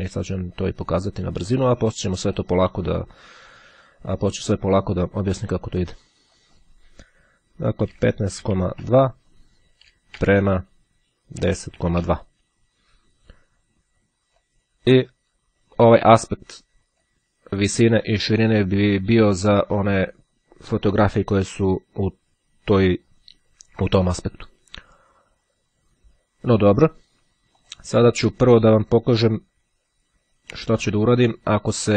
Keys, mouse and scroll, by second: 2.4 click, 4.6 click, 6.5 click, 7.2 KP_1, 7.4 KP_5, 8.4 KP_Decimal, 8.8 shift+;, 10.9 KP_1, 11.0 KP_0, 11.2 KP_Decimal, 11.2 KP_2, 14.6-17.6 drag, 27.8 click, 30.3-31.9 drag.